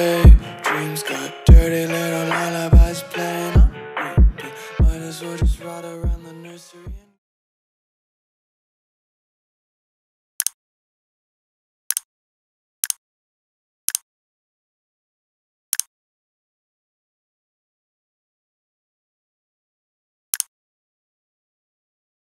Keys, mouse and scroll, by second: 5.8 right click, 6.4 click.